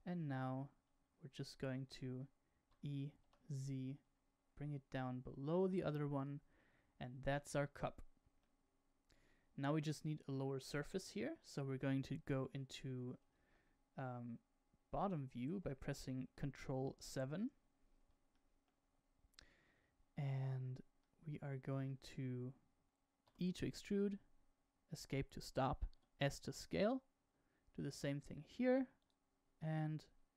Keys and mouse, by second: 2.6 e, 8.3-11.2 middle drag, 13.3 KP_7, 16.5 ctrl+KP_7, 18.2 shift+middle click, 21.0 shift+middle click, 23.2 e, 25.9 s.